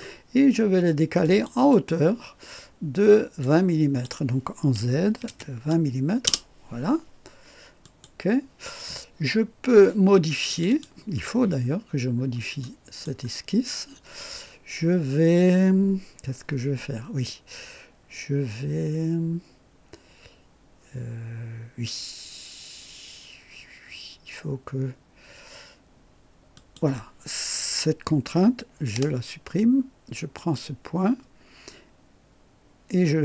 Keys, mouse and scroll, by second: 1.2 click, 1.7 click, 3.4 click, 5.1 KP_2, 5.2 KP_0, 6.2 KP_Enter, 7.8 click, 10.5 click, 11.6-12.0 scroll up 1, 12.1-12.4 scroll down 1, 12.6-13.2 right drag, 13.3-13.8 scroll down 1, 26.5 click, 28.9 Delete, 30.4 click, 33.1 click.